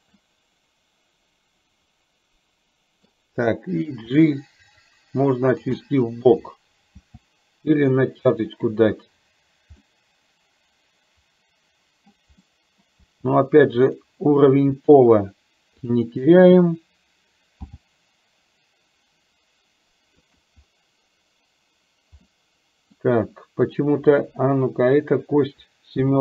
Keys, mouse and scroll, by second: 0.2-3.1 middle drag, 4.1 g, 6.0 middle click, 7.1 g, 9.9 middle click, 11.0-12.2 middle drag, 12.5 middle click, 13.1 g, 15.0 KP_1, 15.9 click, 17.9 g, 22.4 middle click, 23.9 click, 26.1 KP_7.